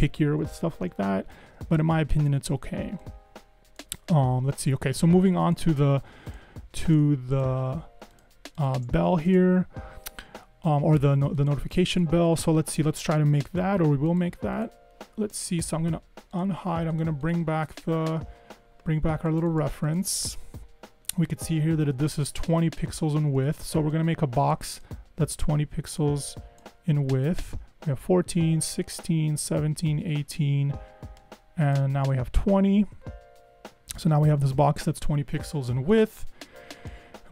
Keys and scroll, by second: 0.9 super+-, 9.4 BackSpace, 23.6 r, 33.1 Left.